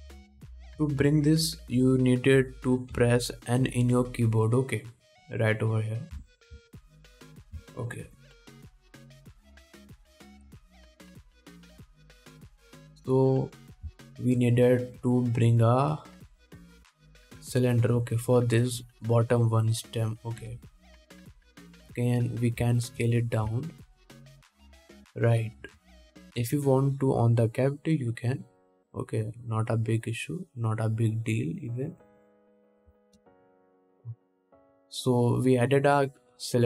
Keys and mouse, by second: 0.0 click, 0.0 n, 0.5 n, 1.7 n, 2.3 n, 4.2 n, 7.4 n, 7.7 n, 8.2 click, 9.1-12.3 shift+middle drag, 15.3 shift+a, 21.6 s, 23.1-23.7 drag, 23.7 middle click, 23.8 click, 23.9-28.2 shift+middle drag, 28.2-34.7 drag, 34.7-36.6 middle drag, 35.5 s.